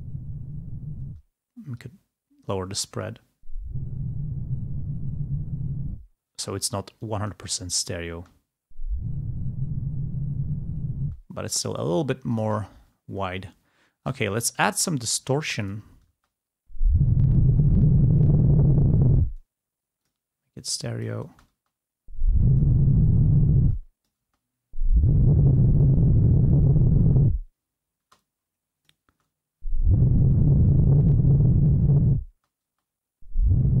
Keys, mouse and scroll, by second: 1.2 space, 1.9 click, 3.0 space, 6.5 space, 7.0-8.2 drag, 8.3 space, 11.1 space, 12.3 click, 14.1 click, 14.6 click, 15.7 click, 16.3 space, 17.3-19.8 drag, 20.1 click, 20.9 click, 21.4 space, 22.4 click, 23.8 click, 23.8 space, 28.1 space, 28.4 click, 29.2 space, 31.0-32.3 drag, 32.4 space.